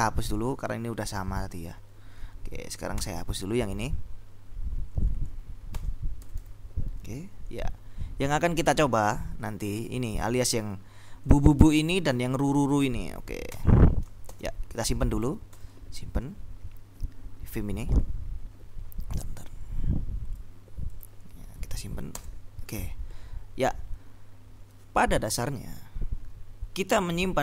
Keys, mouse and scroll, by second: 0.6 ctrl+Left, 3.3 Escape, 5.8-6.7 typing, 7.7 Down, 8.4 Up, 9.0 Down, 9.3 Up, 10.6 ctrl+Right, 11.6 ctrl+Left, 12.2 ctrl+Down, 12.9 End, 14.1 shift+Escape, 14.4 shift+;, 15.3 w, 15.7 q, 20.2 click, 20.6 click, 20.9 click, 21.3 click, 22.2 Return.